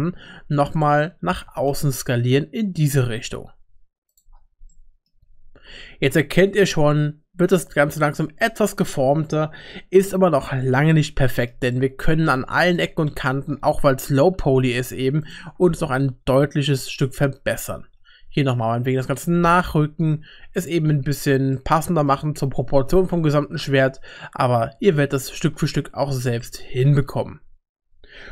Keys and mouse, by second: 1.5 s, 4.7 middle click, 5.2 Tab, 10.1 middle click, 10.6 shift+middle click, 11.2 middle click, 11.7 middle click, 12.6 shift+middle click, 13.1 middle click, 13.8 Tab, 14.3 3, 15.8 g, 18.0 2, 19.2 g, 21.3 Tab, 21.6 middle click, 23.8 middle click, 26.4 shift+middle click.